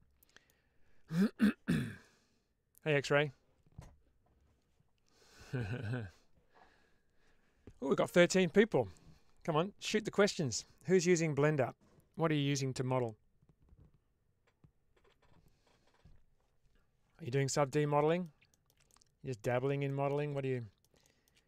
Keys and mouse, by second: 17.3-18.1 middle drag, 18.4 shift+middle click, 18.8-19.4 middle drag, 19.8 shift+middle drag, 20.2-20.8 middle drag.